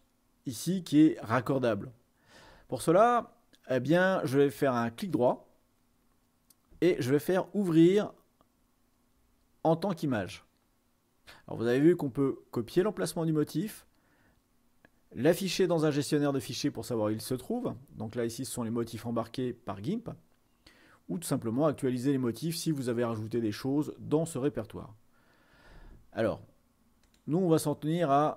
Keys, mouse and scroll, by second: 27.1-28.2 drag.